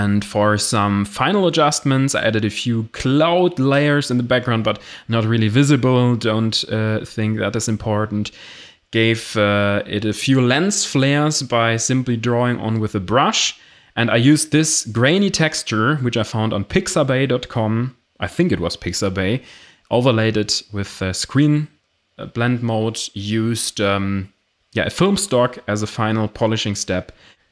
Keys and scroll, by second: 24.9 Return.